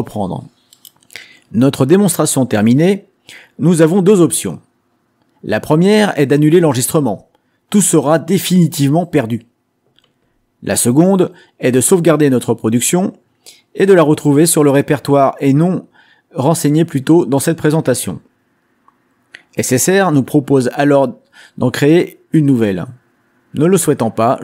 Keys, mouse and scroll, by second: 14.3-15.4 drag, 23.1-24.4 drag.